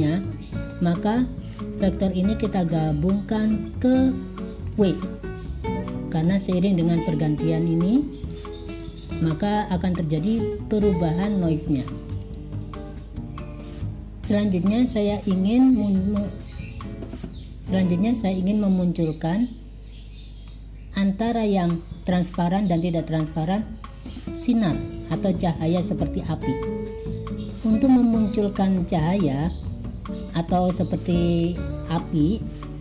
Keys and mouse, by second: 0.0 click, 1.9-4.9 drag, 8.2 click, 8.7 click, 9.1 click, 9.4 click, 12.3 click, 29.1 click, 30.7 click, 31.5 click.